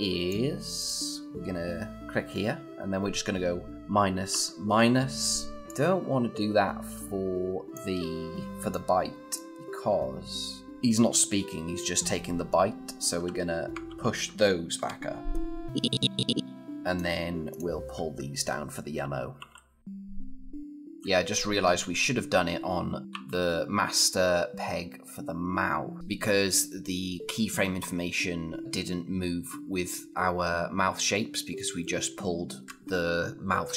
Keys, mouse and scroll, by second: 4.7 typing, 5.6-6.7 click, 10.7-11.7 scroll up 1, 12.8 =, 13.7 shift+=, 15.7-16.9 click, 18.8 -, 23.0 o, 24.3-25.7 scroll up 2, 25.7 scroll up 1.